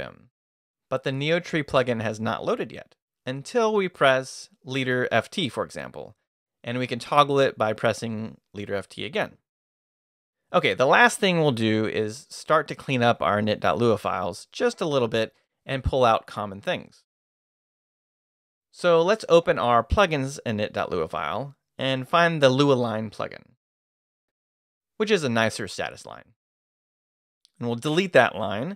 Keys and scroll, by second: 4.4-5.4 typing, 8.3-9.2 typing, 17.8 BackSpace, 19.0-21.0 typing, 21.1 Up, 22.1 Return, 23.7-26.3 typing, 27.4 Return, 27.9 shift+v.